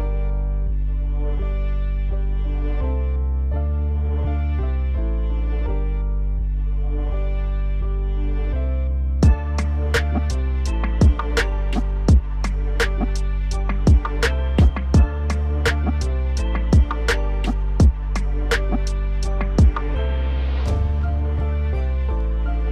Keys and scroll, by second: 4.4 F4, 9.6 F4, 18.9 F4.